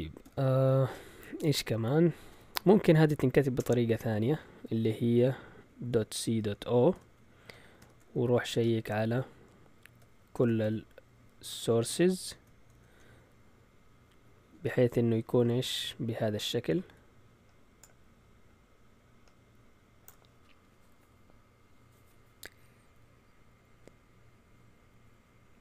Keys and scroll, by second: 0.2 a, 2.6 Up, 3.5 Return, 5.8-9.0 typing, 10.3-13.2 typing.